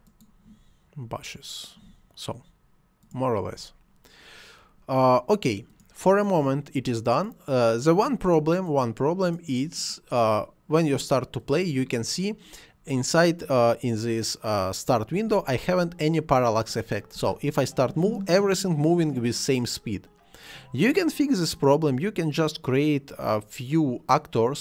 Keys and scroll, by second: 17.1 space.